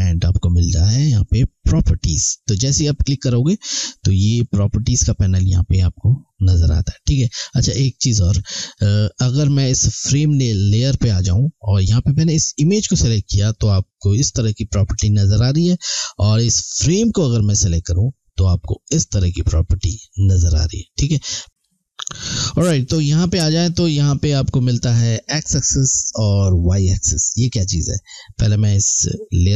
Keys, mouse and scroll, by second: 3.5 click, 12.5 click, 16.8 click, 29.0 click.